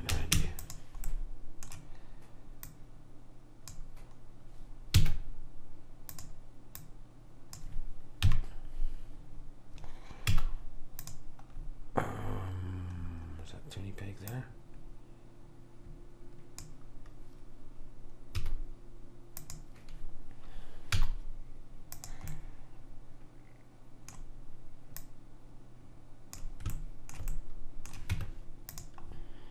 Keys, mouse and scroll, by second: 2.7 click, 5.0 s, 6.9 click, 8.5 KP_3, 10.4 z, 14.4 click, 18.5 s, 21.0 z, 22.4-23.7 middle drag, 25.1 click, 26.8-27.9 middle drag, 28.2 Tab.